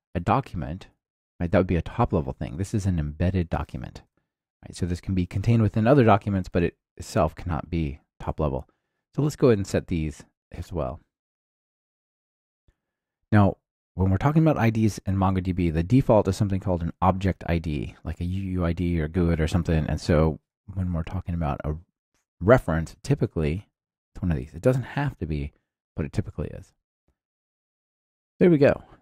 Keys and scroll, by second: 1.5 Return, 6.5 alt+super+l, 11.3 Return, 19.4 Return, 22.9 super+c, 23.5 ctrl+alt+shift+Right, 24.7 super+v, 26.9 ctrl+alt+shift+Left, 27.3 Return.